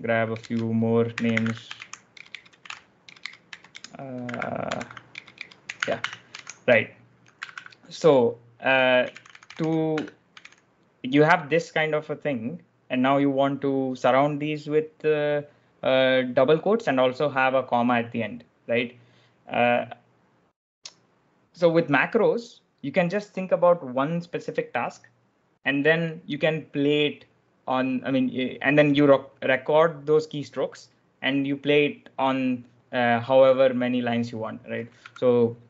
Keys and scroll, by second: 0.4 super+Tab, 0.8-10.8 typing, 34.9 b.